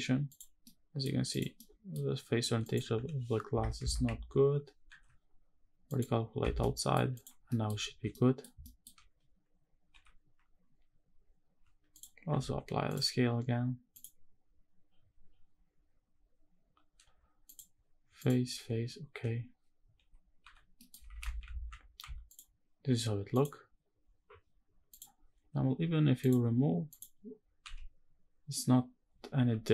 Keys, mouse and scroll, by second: 0.0 click, 0.3-0.7 middle drag, 1.0 click, 1.3-1.7 middle drag, 1.8-2.3 scroll up 2, 2.3 click, 2.7 g, 3.2 Escape, 3.5 Tab, 3.8 a, 4.6 alt+n, 6.1 Tab, 6.3-6.6 middle drag, 6.9 click, 7.1 scroll down 1, 7.2 middle drag, 7.6 ctrl+s, 7.8 middle drag, 8.3 shift+middle drag, 9.6 n, 10.5-11.6 scroll down 2, 11.6 click, 12.1 ctrl+a, 13.7 click, 17.2-18.2 drag, 19.7 n, 20.1 n, 20.5 middle click, 21.0 shift+`, 23.0 click, 24.6 click, 25.9 click, 26.6 click, 27.3 h, 29.2 ctrl+z.